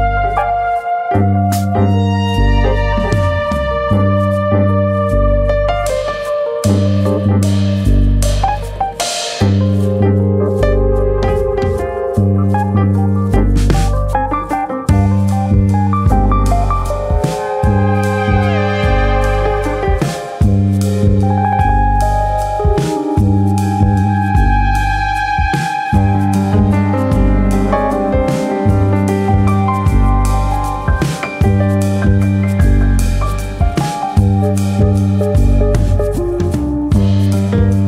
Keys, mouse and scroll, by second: 0.1 right click, 1.0 click, 1.4 right click, 2.0 click, 3.9 click, 5.5 click, 6.1-6.8 scroll up 1, 6.9-7.5 scroll up 4, 7.5 shift+middle click, 7.7 middle click, 8.0 click, 8.2 Tab, 8.4 scroll up 1, 8.7 middle click, 9.1 shift+middle click, 10.3 ctrl+r, 12.4 click, 12.5 middle click, 12.9 shift+middle click, 13.1 middle click, 13.5-14.1 scroll up 2, 14.1 alt+s, 16.4 click, 16.4-17.3 scroll up 1, 17.3 shift+middle click, 17.6 middle click, 18.6 click, 19.3 ctrl+click, 19.6 middle click, 20.0 middle click, 20.5 click, 22.5 middle click, 22.6 middle click, 22.8 scroll down 3, 23.1 shift+middle click, 23.3 shift+middle click, 24.1-24.6 scroll up 2, 24.3 shift+middle click, 24.6 middle click, 25.4 click, 25.6 shift+click, 25.8 middle click, 26.3 click, 27.1 click, 27.2 shift+click, 27.4 shift+click, 27.8 click, 29.7 click, 29.8 shift+click, 31.1 middle click, 31.7 middle click, 32.5 middle click, 32.9 middle click, 33.5 click, 34.0 shift+click, 34.3 middle click, 34.9 click, 35.7 click, 35.9 shift+click, 36.1 shift+click, 36.7 click, 37.7 middle click.